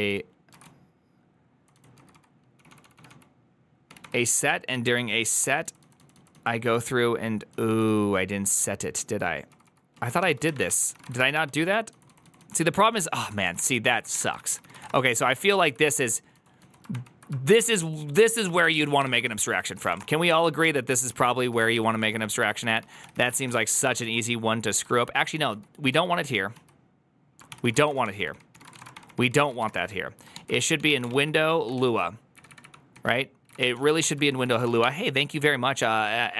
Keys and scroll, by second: 0.0-32.2 typing, 0.4 ctrl+u, 10.5 ctrl+c, 10.6 ctrl+c, 14.3 ctrl+c, 14.3 ctrl+c, 15.4 ctrl+u, 27.4 ctrl+c, 30.2 ctrl+p, 32.2 Up, 32.3 Up, 32.5 Up, 32.8 Down, 33.4 Up, 34.1 Down, 34.1 Return, 34.1 ctrl+c, 34.1-35.2 typing.